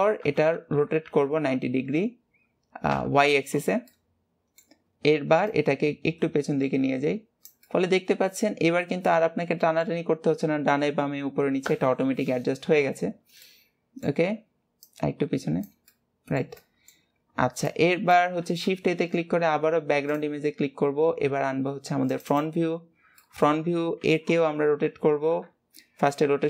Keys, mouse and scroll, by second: 0.4 KP_1, 4.0-5.6 middle drag, 5.6-7.8 drag, 7.8-11.0 middle drag, 13.6-15.0 middle drag, 15.0-16.1 drag, 16.1-17.8 middle drag, 17.8-23.3 drag, 23.3 middle click, 24.2 alt+r.